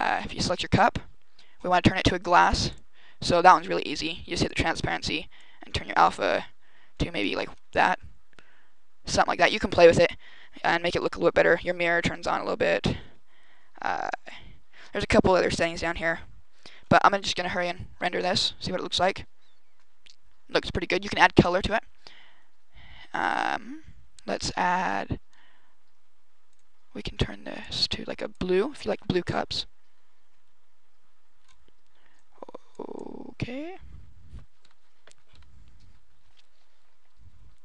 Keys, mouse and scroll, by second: 0.3 right click, 1.2-1.7 scroll up 11, 2.3 click, 2.6 click, 3.1-3.7 scroll down 10, 4.2 click, 5.2 click, 7.3-8.4 scroll up 5, 8.4-8.8 scroll up 3, 9.1-10.0 scroll down 5, 11.5 click, 12.2 click, 13.0-13.7 scroll down 9, 14.4-15.0 scroll down 5, 15.0 click, 15.6 click, 16.0-16.4 scroll down 2, 16.4-17.0 scroll up 8, 17.0-17.6 scroll down 2, 37.4 Escape.